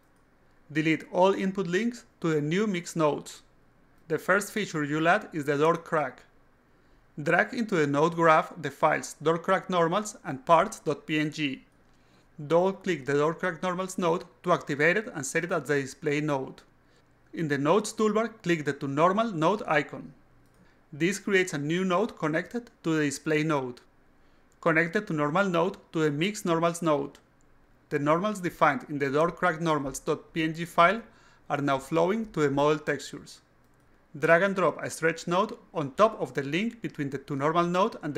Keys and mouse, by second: 0.6 click, 1.2 click, 1.4 click, 1.9 click, 2.5 click, 3.1 click, 3.6 click, 6.6 click, 7.5 click, 8.9-9.8 drag, 11.3-12.3 drag, 12.5 click, 12.7 click, 13.5 click, 18.2 click, 19.9 click, 24.8 click, 25.9-27.2 drag, 29.5-31.1 alt+drag, 35.1 click, 36.8-38.1 drag.